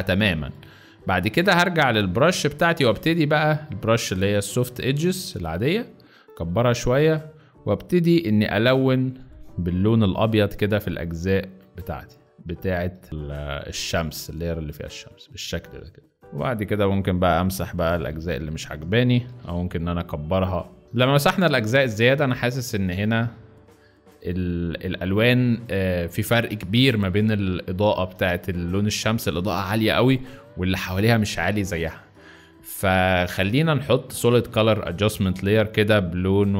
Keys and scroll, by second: 8.3-10.0 typing, 16.2 b, 19.2 ctrl+t, 20.8 z, 20.9 space, 25.5 z.